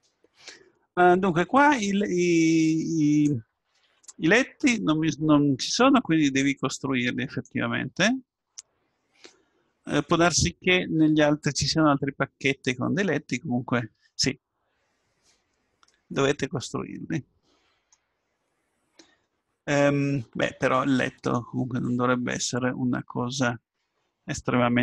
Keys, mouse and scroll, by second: 2.6-5.2 drag, 6.4-8.1 drag, 8.3-12.3 middle drag, 16.1-22.6 middle drag.